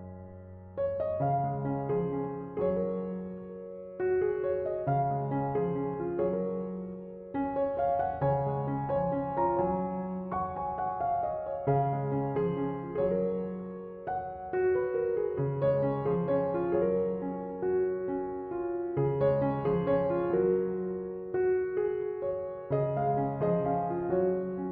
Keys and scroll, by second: 2.4 space, 9.0 space, 14.6 space.